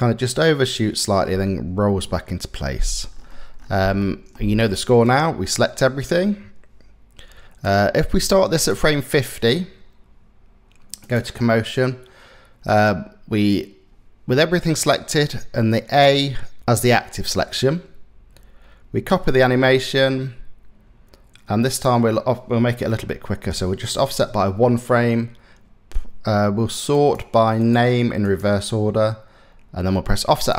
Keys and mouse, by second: 0.9 space, 3.6 shift+click, 4.7 click, 7.3-8.3 drag, 18.7 click, 21.3-23.8 drag, 26.5 click, 27.9 click, 30.1 click.